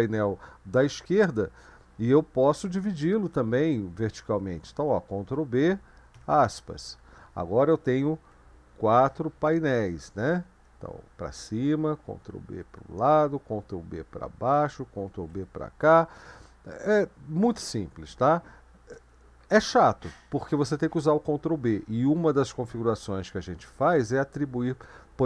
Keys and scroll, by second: 5.3 ctrl+b, 6.1 shift+', 10.1 ctrl+b, 10.6 Up, 12.1 ctrl+b, 12.5 Right, 13.6 ctrl+b, 13.9 Down, 15.1 ctrl+b, 15.3 Left.